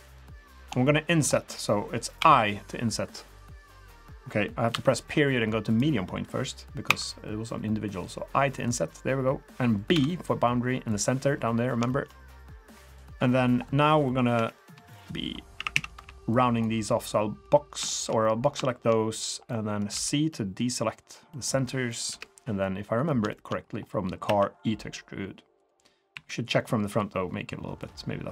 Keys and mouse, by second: 0.0 middle drag, 0.5 middle drag, 0.8-1.2 shift+middle drag, 1.4 middle drag, 2.2 |, 4.7 |, 6.9 i, 8.5 |, 11.9 shift+drag, 12.2 click, 14.3-16.0 typing, 17.1 click, 17.9 shift+click, 17.9 shift+middle click, 18.3 middle click, 18.6 shift+click, 18.7 shift+middle click, 19.5 middle click, 19.9 c, 22.6-23.0 middle drag, 23.3 shift+middle drag, 24.2 e, 26.1 KP_1, 27.8 click.